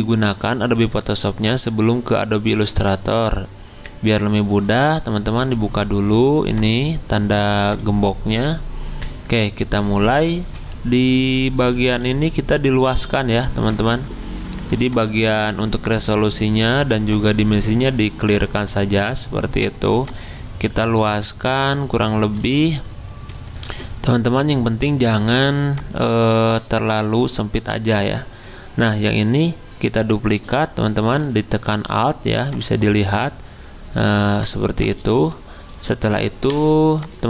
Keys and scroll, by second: 11.9 c, 23.7 Return, 25.3 v, 36.4 Return.